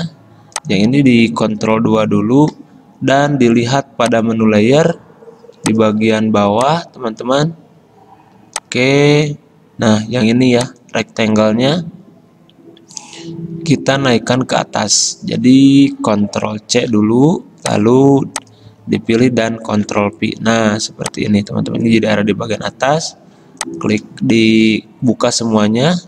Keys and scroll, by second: 16.9 ctrl+c, 19.7 ctrl+f, 22.2 ctrl+z.